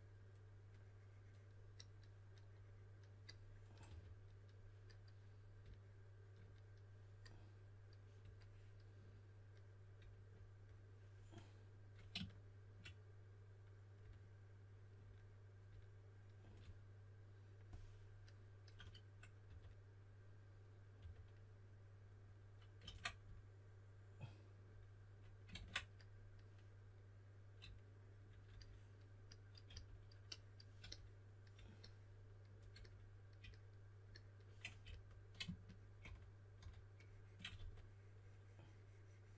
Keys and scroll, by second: 3.6-4.4 typing, 19.4 typing, 21.0 typing, 25.5 super+z, 29.7 s, 34.8 s, 36.0-37.6 typing.